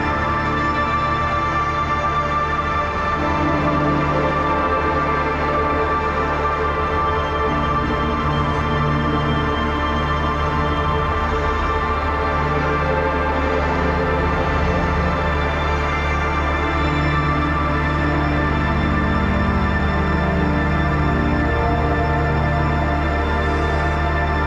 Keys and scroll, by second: 2.3 ctrl+j, 3.1 ctrl+e, 3.5 ctrl+t, 12.4 space, 12.7 ctrl+s, 20.8 ctrl+v, 23.5 ctrl+t.